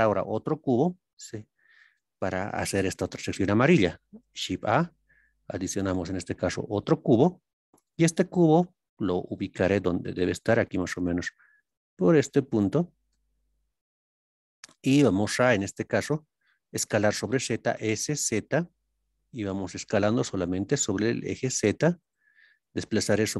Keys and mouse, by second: 0.5-0.8 shift+middle drag, 4.4 shift+a, 10.0 click, 13.3-15.3 shift+middle drag, 22.0 click.